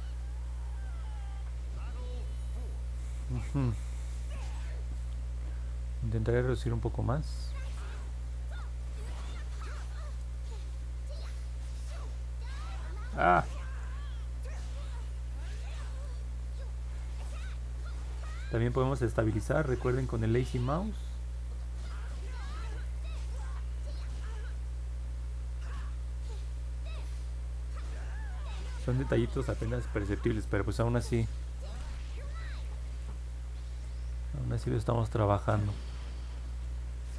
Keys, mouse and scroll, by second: 2.9 middle click, 3.5 middle click, 5.8 click, 10.1-12.9 drag, 13.6 ctrl+z, 14.9-17.4 drag, 18.8-22.3 drag, 24.4-28.9 drag.